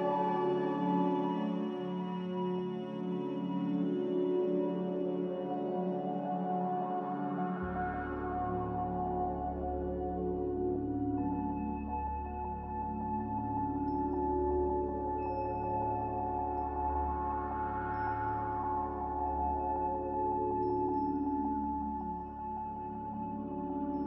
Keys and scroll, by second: 0.6 Delete, 7.9 a, 18.7 s, 19.9-20.6 typing, 21.3 Tab, 22.2 typing, 23.3 Return.